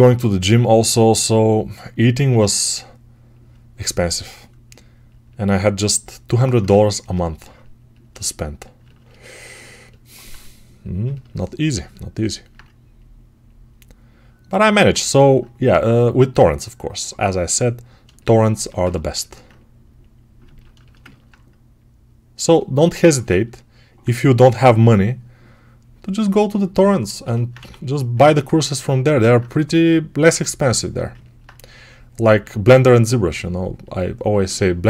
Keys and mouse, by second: 8.0 shift+right click, 14.6-26.7 ctrl+alt+right drag, 24.3 6, 27.4 1, 30.2 3.